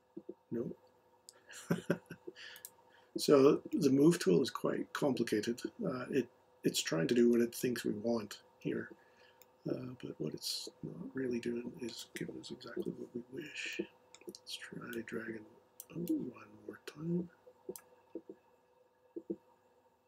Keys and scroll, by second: 12.8 m.